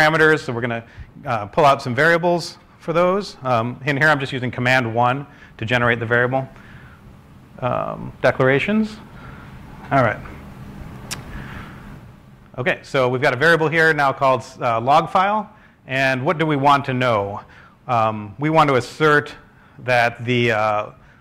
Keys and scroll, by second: 2.8 w, 10.3 scroll down 1, 15.4 scroll, 15.8-18.0 typing, 18.5 ctrl+space.